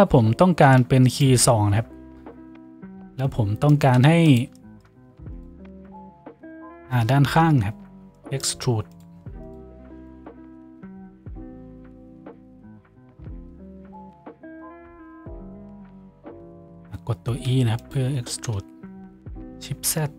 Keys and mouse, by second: 3.0 Tab, 6.4 shift+right click, 7.4 KP_Decimal, 9.4 shift+middle click, 9.4 shift+right click, 10.0 shift+middle click, 10.0 shift+right click, 11.6 shift+middle click, 11.6 shift+right click, 12.0 shift+right click, 12.6 shift+right click, 14.0 shift+right click, 14.6 shift+right click, 15.2 shift+right click, 16.2 s, 17.6 e, 18.2 s.